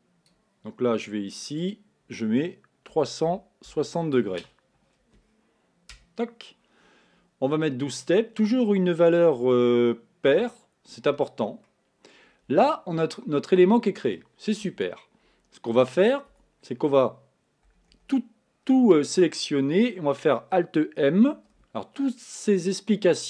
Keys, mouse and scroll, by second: 1.6-11.7 drag, 11.7-18.3 middle drag, 18.3 a.